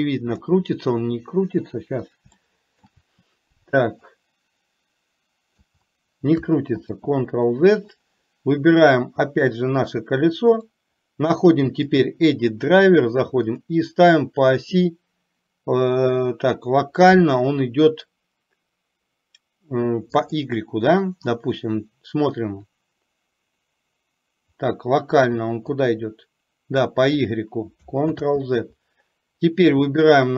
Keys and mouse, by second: 2.5 shift+middle click, 4.4-5.8 drag, 6.9 ctrl+z, 8.9 click, 26.0 click, 28.1 ctrl+z, 30.0 click.